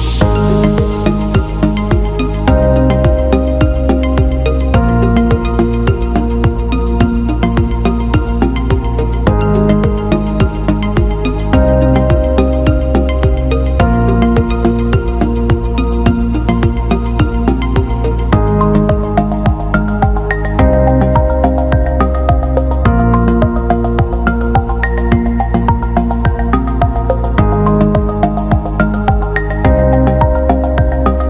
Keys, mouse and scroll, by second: 2.9 drag, 3.9 alt+middle drag, 4.6 alt+middle click, 5.1-5.7 ctrl+alt+middle drag, 7.6 click, 8.5 click, 9.5 click, 10.0 click, 10.5 click, 11.3 alt+shift+middle click, 11.6 alt+middle drag, 12.6 click, 12.7 click, 13.0 click, 13.6 click, 15.2 shift+d, 17.8 alt+shift+middle click, 18.3 alt+middle click, 20.2-21.6 drag, 22.2 click, 22.8-23.5 alt+middle drag, 24.0 click, 26.7 click, 27.2 click, 28.3 click.